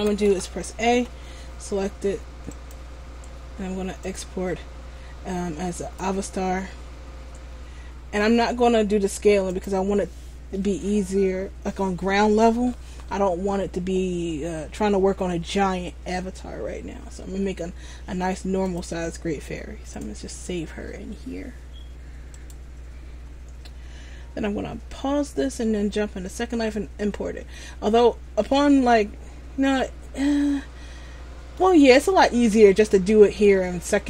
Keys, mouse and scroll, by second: 0.1 a, 0.4 a, 2.6 click, 25.3 click, 27.6 middle click, 32.0 scroll down 2, 32.7 middle click.